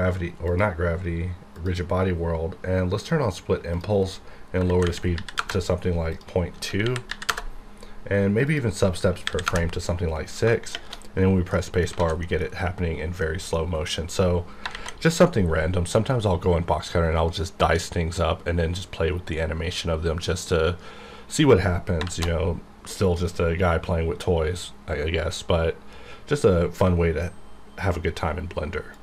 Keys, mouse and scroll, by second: 1.5 click, 3.0 click, 4.6 KP_Decimal, 4.8 KP_0, 5.1 KP_2, 5.4 KP_Enter, 6.1 click, 6.8 KP_Decimal, 7.1 KP_2, 7.3 KP_Enter, 8.5 click, 9.2 KP_6, 9.4 KP_Enter, 10.7 shift+_, 11.5 middle click, 12.0 alt+a, 12.2 middle click, 12.5-13.0 scroll up 1, 13.2-14.7 middle drag, 14.7 shift+Left, 21.9 shift+Left, 22.3 shift+Left.